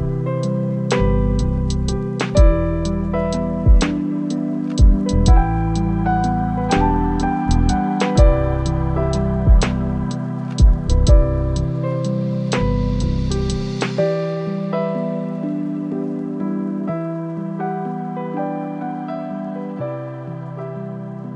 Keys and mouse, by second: 3.4-3.9 shift+drag, 6.1 click, 6.9 shift+d, 8.6-11.0 drag, 11.9-14.3 drag, 15.3 click, 15.6 click, 17.7 click.